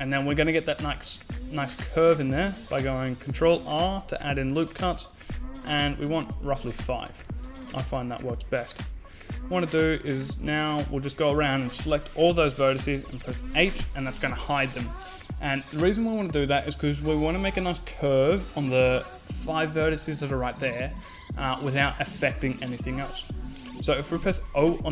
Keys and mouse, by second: 1.8 ctrl+r, 6.1 a, 6.9-9.3 drag, 9.3-11.2 middle drag, 11.7 h, 22.9 o.